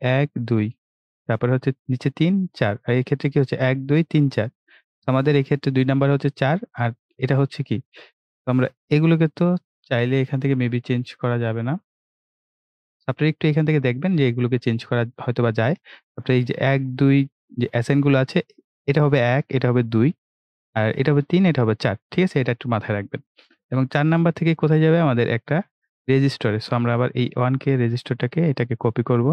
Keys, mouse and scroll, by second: 7.7 right click, 8.7 click, 16.4 click, 27.3-29.3 drag.